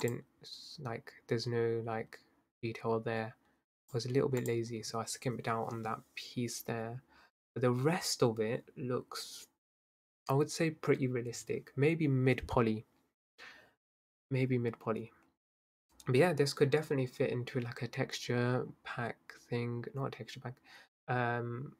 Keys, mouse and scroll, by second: 0.1 click, 3.9 click, 4.4 click.